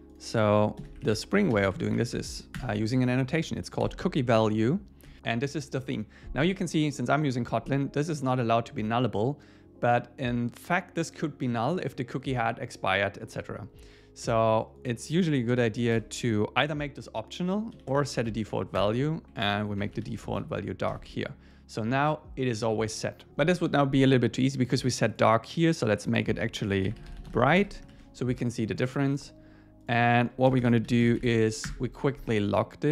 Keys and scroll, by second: 0.8 alt+l, 2.6 Return, 5.1 Tab, 18.8 Return, 20.9 Escape, 27.6 Escape, 27.9 super+s, 30.5 Return, 31.8 Return.